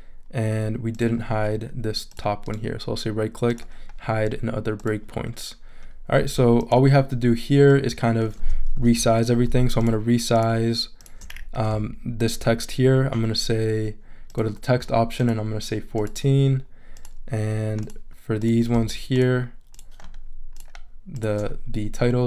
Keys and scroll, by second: 8.7 super+-, 9.5 shift+super+-.